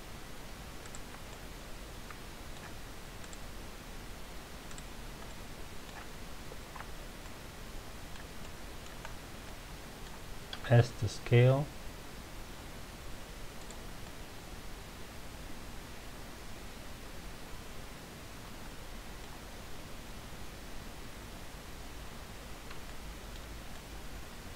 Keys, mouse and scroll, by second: 0.8 shift+click, 1.3-3.2 middle drag, 3.2 shift+click, 4.6 shift+click, 5.2-9.1 middle drag, 9.1-9.4 scroll down 2, 9.4-10.5 middle drag, 10.5 s, 13.6 click, 14.0-17.0 middle drag, 19.7 scroll up 1, 22.8-24.5 shift+middle drag.